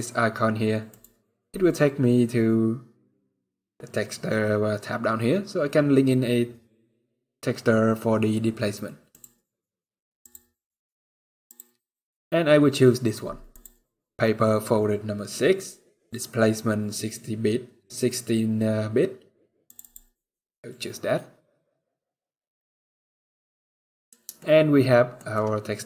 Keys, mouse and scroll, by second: 0.6 click, 4.6 scroll down 1, 8.8 click, 21.7 click, 22.6-23.1 scroll down 3, 22.9 middle click, 23.9 scroll up 1, 24.1 shift+middle click, 24.9 shift+scroll down 1, 25.1 middle click, 25.6 scroll up 2.